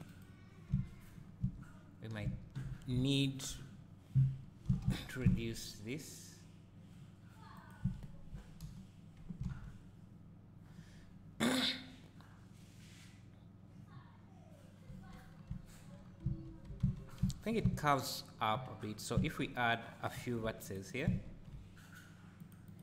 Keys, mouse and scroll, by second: 0.1 click, 0.7 `, 1.2 scroll down 1, 1.4 Tab, 2.2 1, 2.6 2, 3.1 alt+click, 4.6 g, 7.6 click, 8.6 KP_0, 9.5 alt+a, 10.3-12.1 scroll down 1, 14.9 Tab, 15.3 scroll down 1, 15.5 `, 16.0 scroll down 2, 16.2 Tab, 17.6 1, 17.9-18.4 scroll up 1, 18.4-19.3 scroll down 2, 19.3-20.1 scroll down 1, 20.1 ctrl+r, 20.9 right click, 21.2 ctrl+r, 22.7 right click.